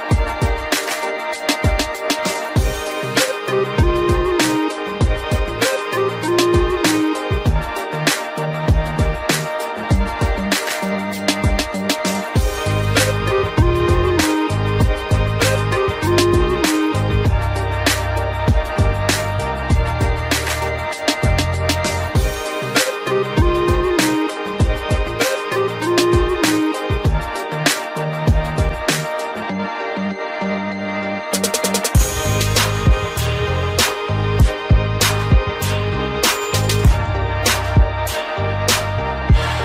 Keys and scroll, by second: 39.3 ctrl+g.